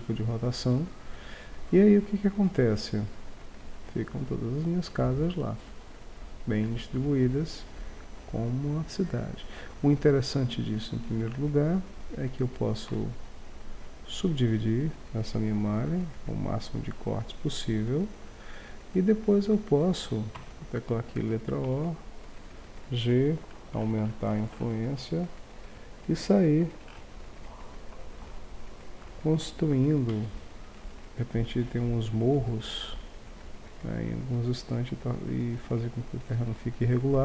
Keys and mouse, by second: 11.3 Tab, 13.0 w, 13.4 middle click, 14.2 middle click, 15.8 middle click, 17.1 middle click, 17.6-19.3 middle drag, 19.3 right click, 20.4 o, 21.6 g, 27.8-29.4 middle drag, 30.0 middle click, 30.7-31.8 right drag.